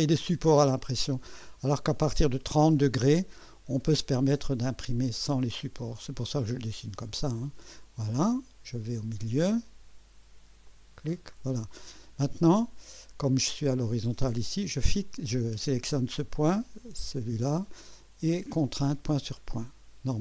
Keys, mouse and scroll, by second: 7.3 click, 10.7 click, 11.2 right click, 12.9 right click, 14.8 click, 17.1 click, 18.9 click.